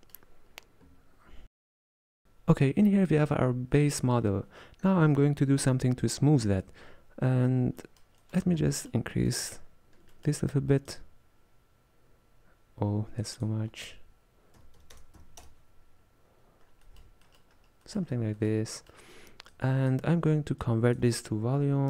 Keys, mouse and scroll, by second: 0.0 middle click, 0.6-1.8 scroll down 1, 1.8-2.2 scroll down 3, 2.2-4.6 middle drag, 7.9 middle click, 8.7 scroll up 2, 8.8 middle click, 9.5-10.2 scroll up 7, 10.2-10.9 middle drag, 10.9-16.4 shift+drag, 16.7 scroll down 2, 16.9-18.1 middle drag, 18.1 scroll down 1, 18.4-19.6 middle drag, 19.6-20.7 drag, 20.7-21.8 drag.